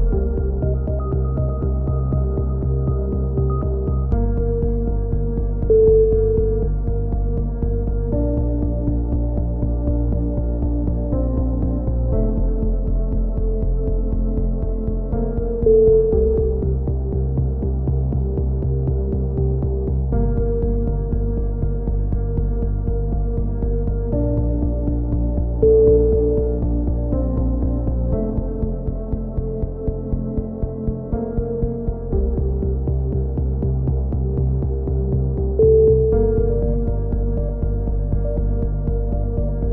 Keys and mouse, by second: 2.5 a, 2.8 middle click, 3.4 z, 3.8 click, 4.4 z, 5.1 c, 7.3 click, 8.2 middle click, 8.4 click, 12.0 click, 13.8 c, 15.2 click, 15.2 right click, 16.3 c, 17.2 click, 17.6 middle click, 18.1 click, 20.8 a, 21.1 z, 21.4 Tab, 22.3 z, 23.1 Tab, 24.0 b, 25.6 click, 28.7 a, 29.0 z, 29.8 z, 31.6 ctrl+r, 35.6 a, 35.8 z, 36.2 z, 37.3 c.